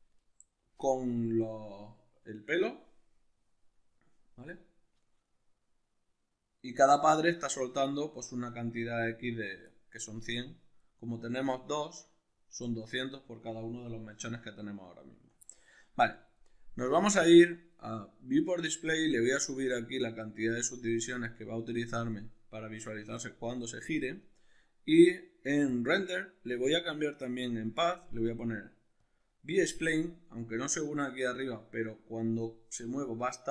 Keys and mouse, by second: 14.1 alt+q, 17.2-29.1 drag.